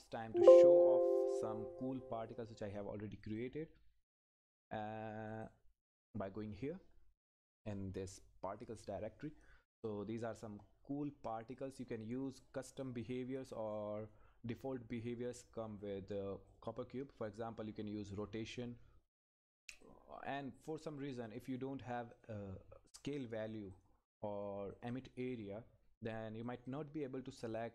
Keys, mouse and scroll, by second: 9.8 click, 10.2 Left, 11.5-12.2 scroll down 3, 11.6 Left, 11.9 Left, 12.2 Left, 12.8 click, 13.3-13.7 scroll up 1, 13.7 click, 14.3 scroll up 1, 15.3 click, 15.9-16.5 scroll down 1, 16.5 click, 20.6-21.3 scroll down 1, 21.3 click, 25.5-26.4 scroll down 1, 26.4 click.